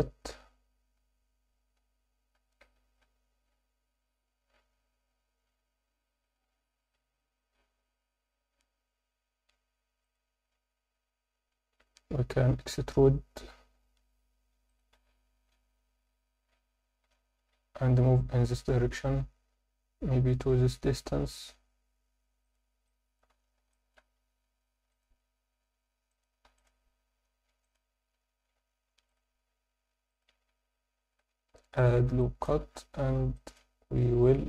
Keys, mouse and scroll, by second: 1.0 KP_7, 2.3 s, 2.7 shift+z, 10.9 KP_1, 11.5 scroll up 1, 14.0 e, 14.7 click, 14.9 z, 17.0 g, 17.4 z, 22.4 click, 22.8 alt+middle click, 23.3 z, 23.7 alt+shift+middle click, 24.6 ctrl+r, 26.1 click, 26.5 ctrl+r, 27.6 click, 28.9 ctrl+r, 30.1 click, 30.3 Tab, 31.1 ctrl+2, 31.4-31.8 scroll down 1, 31.8 Tab, 32.2 alt+shift+middle click, 32.7-33.2 scroll up 1, 33.3 alt+shift+middle click.